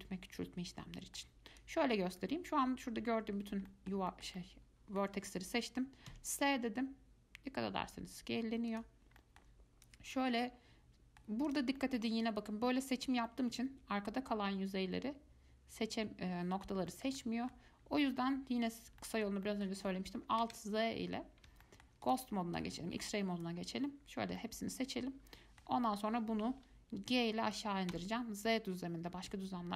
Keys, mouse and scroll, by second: 1.8 click, 3.9-6.3 middle drag, 6.3 s, 9.4 middle click, 10.1 click, 10.6-11.7 middle drag, 11.7 click, 12.0 middle click, 12.4 click, 13.5-16.5 middle drag, 17.1-17.9 shift+middle drag, 17.9 scroll up 1, 19.2-20.6 middle drag, 20.6 alt+z, 21.8-22.2 shift+middle drag, 22.2 click, 22.8 click, 24.6-26.5 middle drag, 26.5 g.